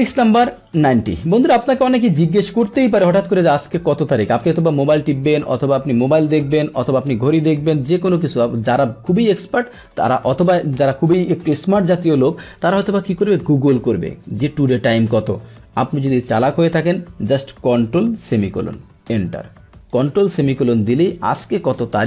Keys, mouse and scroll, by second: 0.0-1.5 middle drag, 1.5 click, 19.1 Return, 21.7 click.